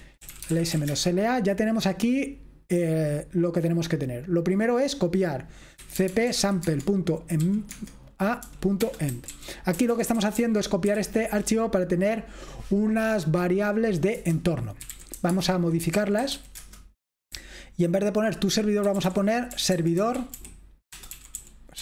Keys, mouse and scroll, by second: 0.0-1.3 typing, 5.7-11.5 typing, 13.6-21.8 typing.